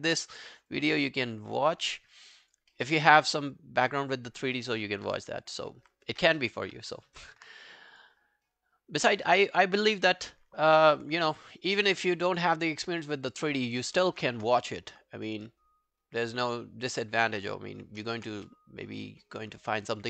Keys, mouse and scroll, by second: 1.9 alt+middle click, 2.2 alt+right click, 2.4 alt+click, 2.7 alt+middle click, 4.8 alt+middle click, 5.1 alt+right click, 5.3 alt+click, 7.9 double click, 10.0 double click, 11.2 alt+middle click, 11.5 alt+right click, 11.7 alt+click, 12.1 alt+middle click, 12.3 alt+right click, 12.6 alt+click, 12.8 alt+middle click, 13.1 alt+right click, 13.3 alt+click, 13.6 alt+middle click, 13.8 alt+right click, 14.4 space, 15.5 space, 16.3-16.7 scroll down 2, 16.9 alt+middle click, 17.3-18.0 alt+scroll up 7, 17.6 alt+middle click, 18.0 alt+middle click, 18.4 w, 19.9 alt+right click.